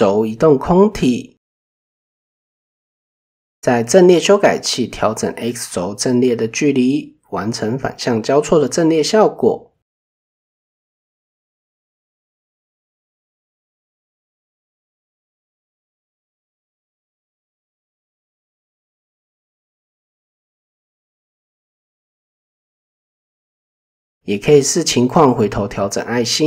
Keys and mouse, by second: 1.6 shift+middle drag, 3.1 click, 5.9 click, 8.1-16.2 shift+drag, 17.1 shift+middle click, 19.1 click, 19.7 click, 23.5 click, 24.3 Tab, 25.9 drag.